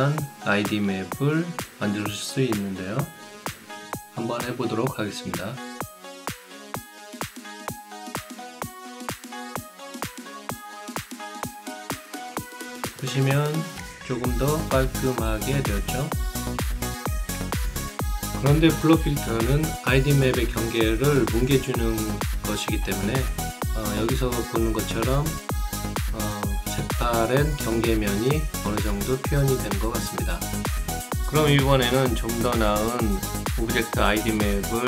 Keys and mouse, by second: 4.4 click, 5.4 click, 6.8 right click, 9.2 click, 9.7 click, 10.9 click, 14.4-16.3 alt+drag, 16.5 alt+middle click, 17.0-18.0 alt+right drag, 18.4 alt+middle click, 18.8 alt+click, 19.4 alt+middle click, 19.8 alt+right click, 20.4 alt+click, 21.0 alt+middle click, 21.3 alt+right click, 24.0 click, 25.5 click, 27.2-29.9 alt+drag, 33.4 KP_1, 33.7 Return.